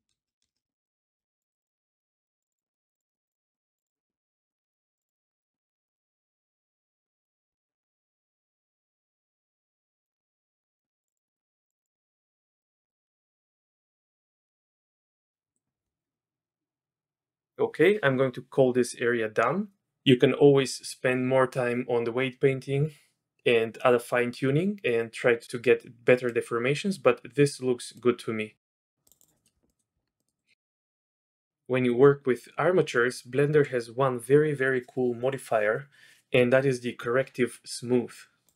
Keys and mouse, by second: 0.0 shift+space, 0.6 shift+space, 0.7 click, 1.2 b, 1.4 click, 1.8 middle click, 2.2 click, 2.6 middle click, 2.9 click, 3.1 middle click, 3.2 click, 3.5 middle click, 3.7 click, 4.1 middle click, 4.7 middle click, 4.9 click, 5.1 click, 5.3 click, 5.6 click, 5.9 click, 6.1 click, 6.7 click, 8.1-10.1 drag, 10.2 middle click, 10.7 click, 11.0 click, 11.3 middle click, 11.4 middle click, 11.6 click, 11.7 click, 11.9 click, 12.9 click, 13.9 click, 14.8 click, 15.2 click, 26.3 middle click, 27.9 middle click, 29.0 click, 29.3 click, 29.7 click, 29.9 Tab, 30.2 click, 30.4 click.